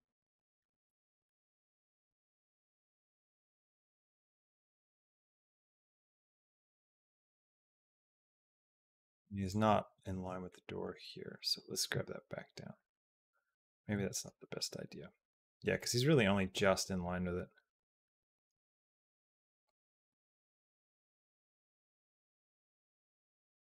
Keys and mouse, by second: 10.4 shift+middle click, 11.1 g, 12.7 r, 14.1 g, 16.9-19.5 drag, 19.7 g, 21.2-22.5 drag.